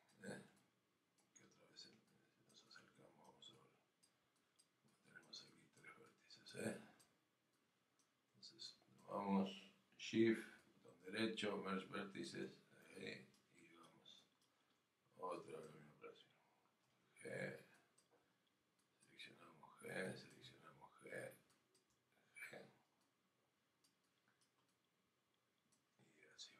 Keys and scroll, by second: 16.8 g.